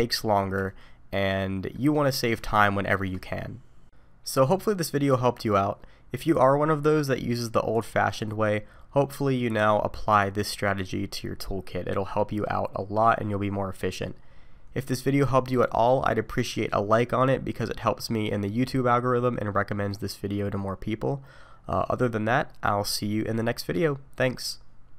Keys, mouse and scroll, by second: 0.7 shift+middle click, 2.6 shift+middle click.